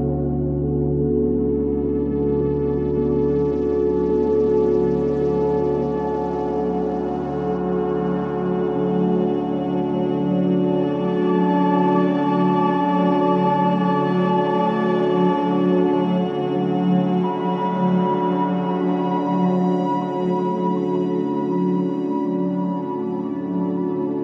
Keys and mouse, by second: 0.0-0.4 typing, 4.7 shift+s, 6.5 click, 9.4 click, 11.1 click, 12.3 click, 13.3-13.7 typing, 14.2 Return, 18.9 s, 19.8-20.7 drag, 20.9 KP_Divide, 22.1-24.2 drag, 22.2 s.